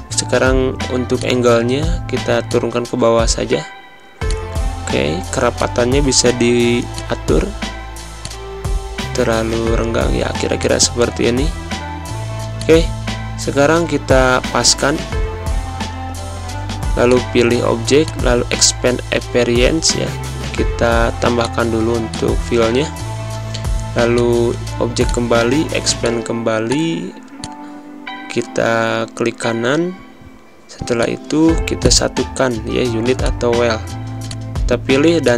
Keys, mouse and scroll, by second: 31.5 click.